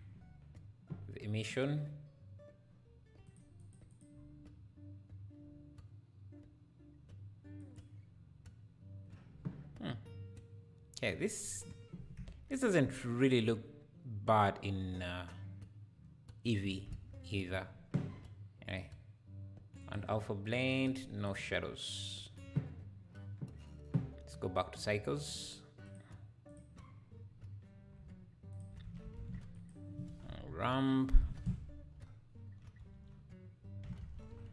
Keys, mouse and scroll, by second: 1.4 click, 3.2-6.9 drag, 7.7 click, 12.2 KP_0, 16.9 KP_0, 18.7-23.6 drag, 25.2-28.6 drag, 29.0 ctrl+s, 29.1 shift+a, 32.9 BackSpace.